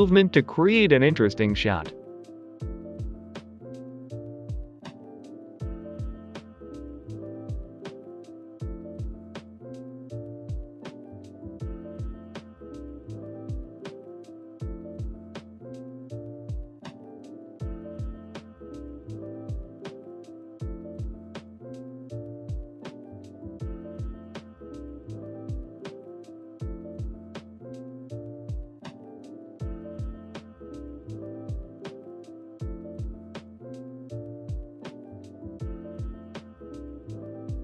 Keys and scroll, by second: 0.0-9.7 typing, 3.5 Escape, 11.8-13.6 typing, 13.5 Escape, 14.8 Return, 14.8 g, 15.4 g, 16.9 typing, 19.0 g, 19.1 Return, 19.5 x, 21.5-24.0 typing, 25.5 g, 26.6-27.1 typing, 28.1 Delete, 29.0-31.7 typing, 31.0 Return, 35.4 g, 35.5 y, 36.2 Delete, 36.8 Delete, 37.1 g, 37.2 x, 37.5 g.